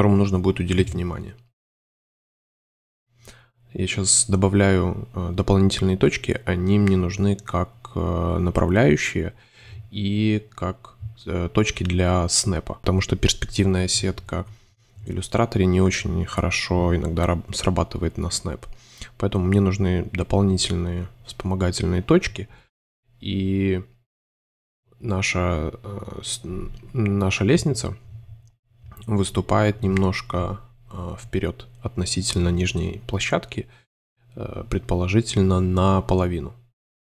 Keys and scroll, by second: 1.2-2.7 typing, 7.0 a, 7.7 shift+c, 8.3 x, 9.3 c, 9.9 super+c, 14.9 a, 15.2 shift+c, 19.1 0, 20.3 a, 22.5 shift+super+z, 24.8 shift+super+z, 24.9 super+a, 26.8 shift+c, 26.9 space, 31.8 shift+super+space, 32.3 v, 32.9 super+g, 33.0 super+space, 34.0 c, 34.8 Delete, 36.0-37.0 typing.